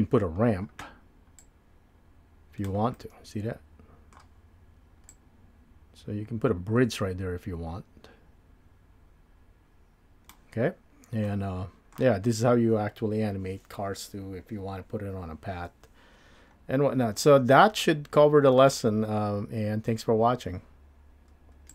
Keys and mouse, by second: 1.4-10.3 drag, 11.3 middle click, 17.9 middle click.